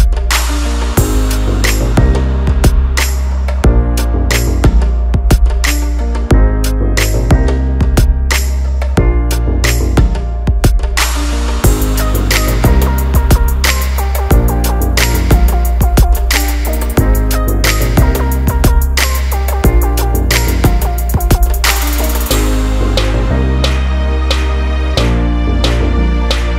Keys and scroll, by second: 1.2 ctrl+alt+z.